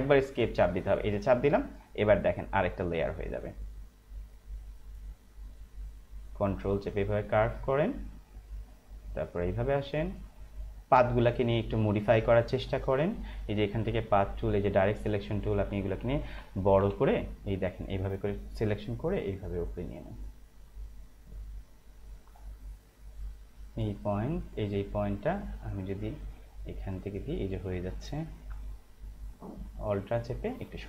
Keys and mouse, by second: 0.8 Escape, 1.7 click, 13.8 right click, 14.7 click, 16.5 ctrl+=, 17.7 click, 22.3 space, 22.4 click, 22.8 space, 22.9 click, 23.2 space, 23.7 click, 28.8 alt+click.